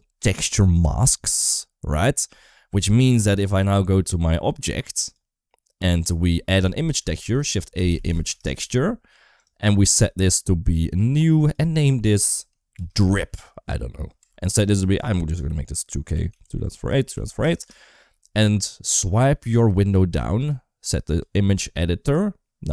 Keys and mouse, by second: 4.6 click, 5.4 middle click, 6.0 middle click, 6.8 shift+a, 9.6 middle click, 9.7 g, 10.8-17.8 drag, 17.4 Return, 19.1 click, 20.3 click, 21.9-22.7 drag.